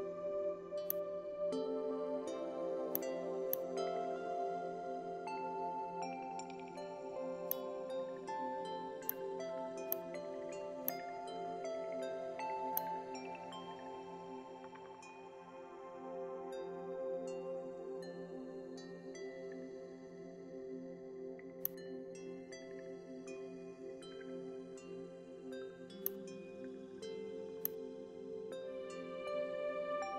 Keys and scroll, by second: 28.5 KP_1, 28.7 KP_8, 29.2 KP_0.